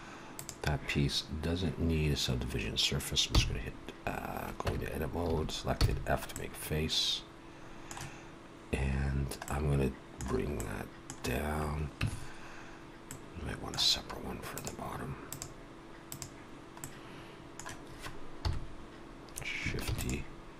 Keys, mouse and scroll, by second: 0.3 click, 3.2 f, 4.6 Tab, 5.2 a, 5.6 f, 6.3 middle click, 9.1 scroll down 1, 9.4 middle click, 10.5 middle click, 12.0 Tab, 13.1 middle click, 14.5 click, 16.8 middle click, 18.3 KP_1.